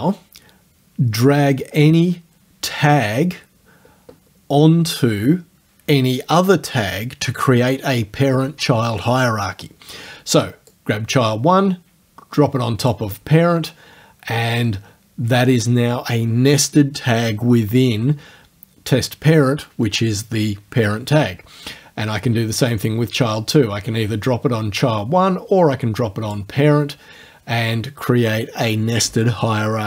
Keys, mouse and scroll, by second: 10.7-13.1 drag, 22.9-26.5 drag.